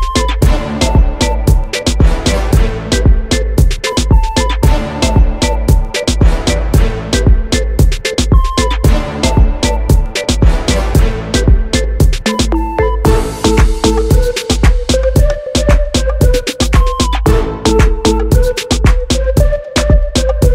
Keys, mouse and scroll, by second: 0.8-1.4 scroll down 1, 2.1 `, 4.8 scroll up 1, 5.7 KP_1, 6.2 scroll up 1, 6.7 scroll up 1, 7.5 click, 8.4-8.8 scroll down 1, 8.8 e, 9.2 e, 10.3 click, 10.4 e, 11.6 click, 12.4 e, 12.8 scroll down 2, 13.0-13.7 scroll up 2, 13.2 Tab, 13.7 click, 13.9 e, 15.1 click, 15.4 e, 15.9 click, 17.4 click, 18.0 g, 18.2 click, 18.7 e, 19.8 e.